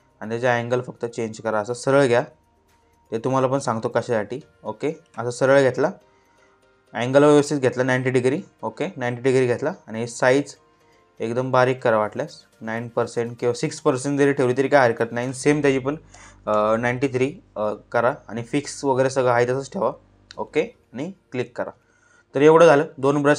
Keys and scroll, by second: 15.6 9, 16.0 3.